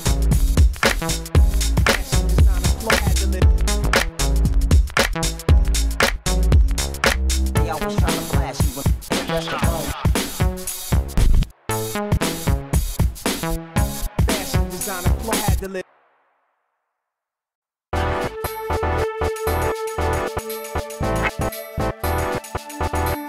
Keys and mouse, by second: 0.4 Tab, 1.1 click, 1.7 ctrl+e, 2.4 ctrl+e, 4.0 ctrl+e, 4.3 Tab, 4.9 Tab, 6.0 ctrl+e, 6.4 Tab, 7.9 Tab, 9.5 Tab, 9.5 ctrl+s, 10.1 Tab, 11.0 Tab, 12.1 ctrl+s, 12.8 KP_1, 15.8 ctrl+s, 17.0 g, 19.6 Tab, 20.3 KP_1, 20.5 KP_3, 21.6 a, 21.6 b, 22.1 x, 22.9 Tab.